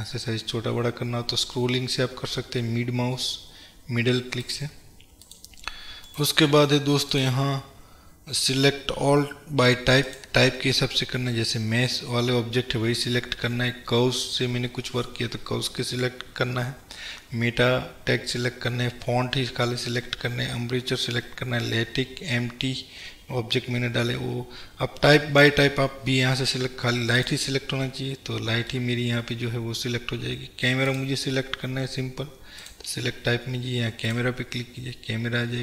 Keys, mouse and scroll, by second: 6.3 right click, 7.2-28.8 drag, 28.0-28.8 scroll down 1, 28.8-30.9 middle drag, 30.9-35.6 drag.